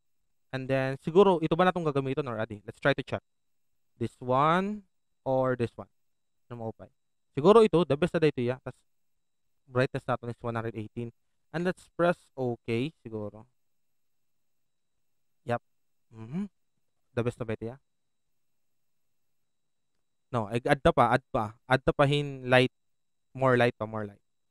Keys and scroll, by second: 20.5 ctrl+z.